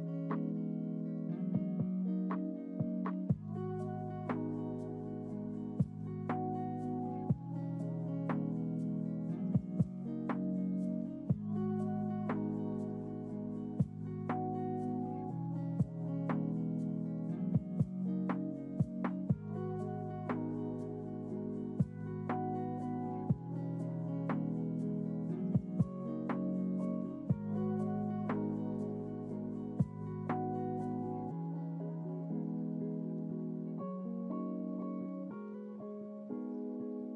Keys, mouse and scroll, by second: 3.0 click, 4.4 click, 6.4-7.2 drag, 8.6 click, 10.5-11.5 drag, 12.8 click, 14.2-16.0 scroll down 6, 16.0-16.3 scroll up 2, 17.1 ctrl+t, 17.6 ctrl+t, 17.7 ctrl+t, 17.8 ctrl+t, 17.8 ctrl+click, 18.0-19.9 ctrl+t, 20.0 ctrl+t, 20.0 ctrl+click, 20.8 ctrl+z, 21.1 ctrl+z, 21.5 ctrl+z, 21.6 ctrl+z, 21.7 ctrl+z, 22.2 ctrl+z, 23.3-26.7 drag, 27.4 click, 29.6 click, 31.2-33.7 ctrl+t, 34.8-36.1 drag.